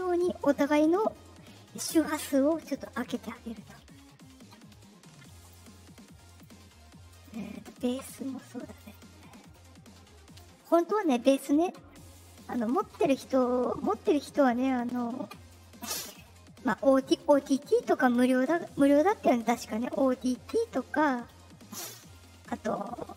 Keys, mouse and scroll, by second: 5.3 click, 6.2 click, 7.0 click, 7.5 click, 8.7 click, 9.5 click, 10.8 click, 12.3 click, 14.7 click, 15.1 scroll down 2.